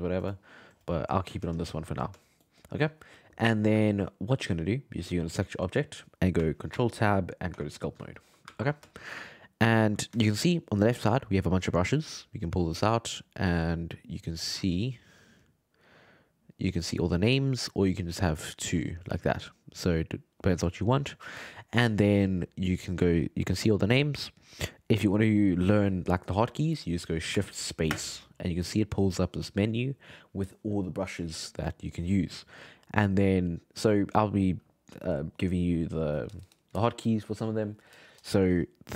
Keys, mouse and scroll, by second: 1.2 scroll down 2, 1.4-2.4 scroll up 8, 2.4-5.2 shift+middle drag, 5.2 right click, 6.7 ctrl+Tab, 8.1-13.0 shift+middle drag, 13.0-17.8 drag, 23.6-26.7 middle drag, 27.9 shift+space, 34.0-34.6 shift+space.